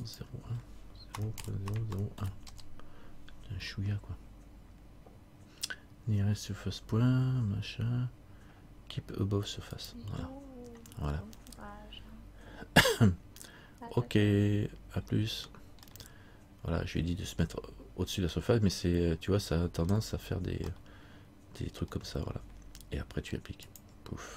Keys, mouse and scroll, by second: 2.1 click, 2.1 KP_0, 7.6-9.9 scroll down 1, 9.9 click, 15.2-15.6 scroll up 1, 16.0 scroll up 4, 16.1 middle click, 20.9 middle click, 22.3-22.8 scroll down 1, 23.8 click.